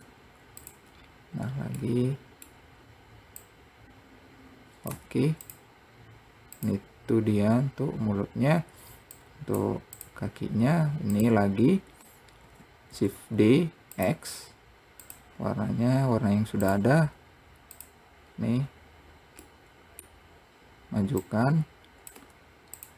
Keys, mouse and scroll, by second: 1.7-2.1 scroll up 1, 2.1-3.7 middle drag, 3.7 click, 6.8 click, 7.6-9.4 scroll down 1, 9.4 click, 10.6 scroll down 1, 11.4 click, 11.8-12.7 scroll up 2, 12.7 shift+d, 15.3 click, 18.2-19.8 drag, 19.8-21.5 middle drag, 21.5 click, 22.5 `.